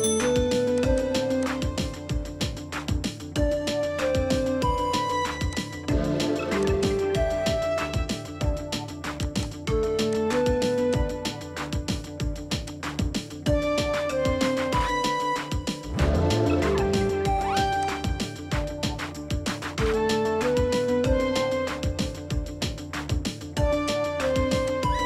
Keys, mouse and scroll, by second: 1.0 double click, 2.6 4, 5.8 typing, 6.9 double click, 9.4 typing, 9.5 double click, 11.5 2, 14.7 typing, 18.9 typing, 20.4 typing.